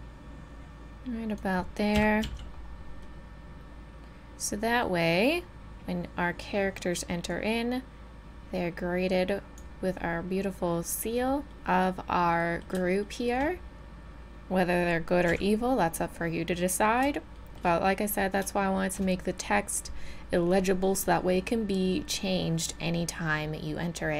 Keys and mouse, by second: 1.9 KP_7, 2.2 z, 2.7 middle click, 4.2 middle click, 7.3-10.0 drag, 10.0 middle drag, 12.3 middle click, 15.3 a, 15.7 middle click, 15.9 middle click.